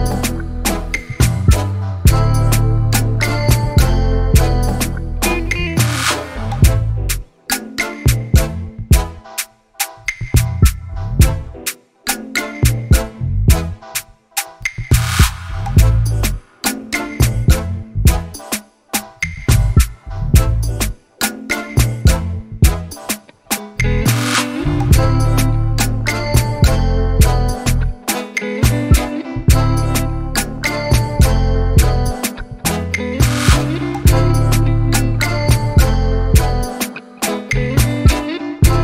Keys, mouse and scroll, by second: 0.9 click, 1.8 click, 3.5-4.9 drag, 5.0-6.6 drag, 6.6 KP_1, 7.4-7.9 shift+middle drag, 7.9-8.3 scroll up 1, 8.3 Tab, 8.9-10.4 scroll up 4, 10.4 s, 11.8 ctrl+z, 13.6 e, 17.1 shift+middle click, 17.7 e, 27.9-28.3 scroll up 1, 28.3 ctrl+b.